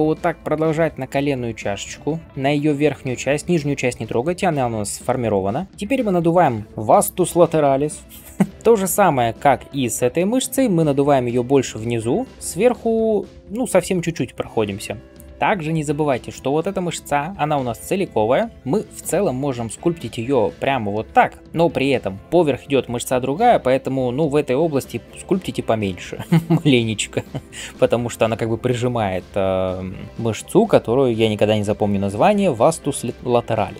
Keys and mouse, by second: 8.5-33.7 drag, 8.5-33.7 middle drag, 8.5-33.7 right drag, 15.3 [.